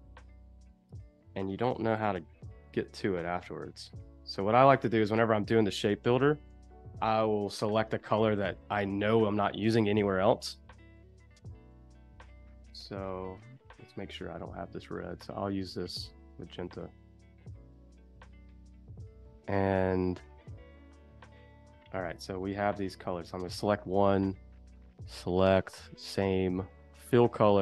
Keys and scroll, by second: 0.7 space, 5.6 space, 18.1 space, 20.9 a.